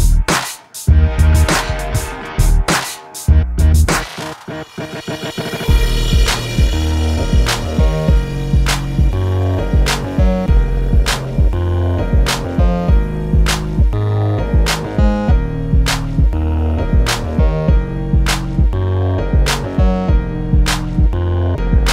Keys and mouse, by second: 0.2 middle click, 0.3 Tab, 1.5 Tab, 1.8 a, 2.4 click, 2.8 click, 3.8 a, 4.0 Tab, 4.8 Tab, 7.6 middle click, 7.9 Tab, 9.2 middle click, 9.8 ctrl+s, 10.3 KP_0, 13.0 Escape, 13.6 KP_0, 14.3 click, 14.6 ctrl+i, 15.2 h, 15.6 Tab, 17.6 middle click, 18.2 middle click, 19.3 ctrl+r, 20.4 middle click, 21.5 ctrl+Tab.